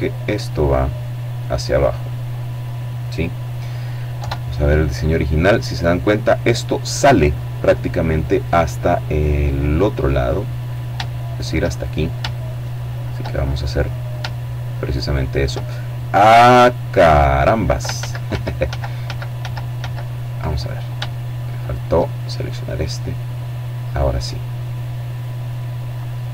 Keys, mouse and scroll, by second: 2.9 KP_7, 6.1-7.8 middle drag, 8.3-10.0 right drag, 9.4 click, 10.2 shift+right click, 11.8 shift+right click, 12.2 shift+click, 14.2 shift+right click, 14.6 shift+click, 15.9 right click, 16.8 ctrl+z, 20.4 shift+right click, 21.6-25.2 drag.